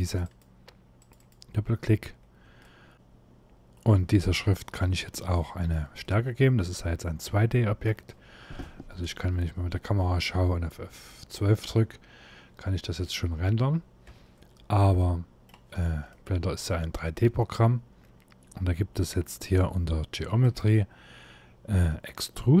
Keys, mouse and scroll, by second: 1.8 scroll up 1, 2.2 shift+middle click, 4.3 middle click, 5.7 middle click, 8.7 KP_0, 12.2 F12, 12.6-13.3 scroll down 2, 13.3 scroll down 1, 13.7 Escape, 14.6 middle click, 15.3-15.7 scroll up 3, 15.9 middle click, 20.1 click, 20.8-22.6 scroll down 1.